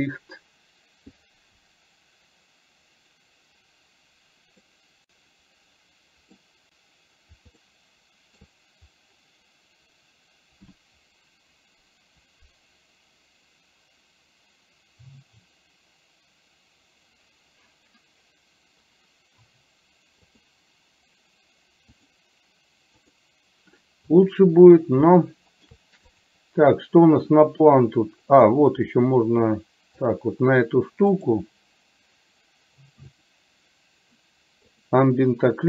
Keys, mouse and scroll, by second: 0.0 click, 4.9-6.4 middle drag, 7.9-8.9 shift+middle drag, 20.6 click, 22.0-23.6 drag, 25.2 shift+middle click, 26.2 click, 30.1 click, 31.2 click, 34.0 click, 34.9 click.